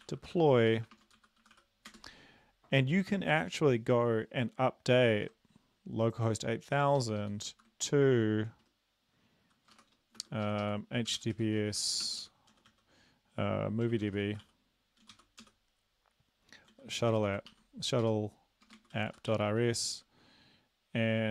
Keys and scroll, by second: 0.0-1.9 typing, 5.2 ctrl+`, 7.0 ctrl+Left, 7.2 ctrl+Left, 7.5 ctrl+Left, 9.8-12.7 typing, 10.4 Left, 10.6 Left, 13.8-15.6 typing, 16.7-20.0 typing.